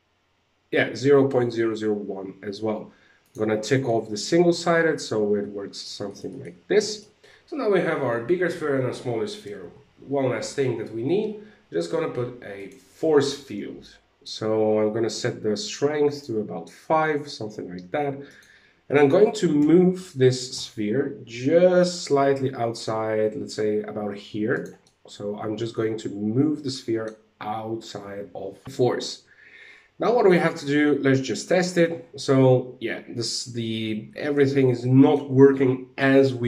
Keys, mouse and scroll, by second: 2.7 click, 3.4 middle click, 5.6 shift+middle click, 5.8 middle click, 6.1 scroll up 2, 6.4 shift+middle click, 7.2 click, 7.2 shift+middle click, 7.2-7.6 scroll down 2, 9.8 shift+a, 12.6 scroll up 2, 12.9 middle click, 14.6 click, 17.8 right click, 19.1 g, 24.3 middle click, 31.1 click, 33.7 scroll down 1, 33.8 middle click.